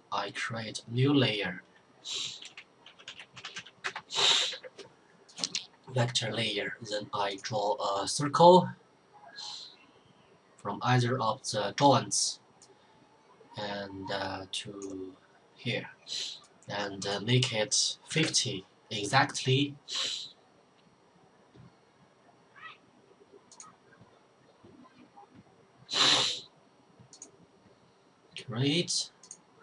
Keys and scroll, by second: 2.1-4.0 typing, 7.2-7.6 typing, 17.7-18.6 typing.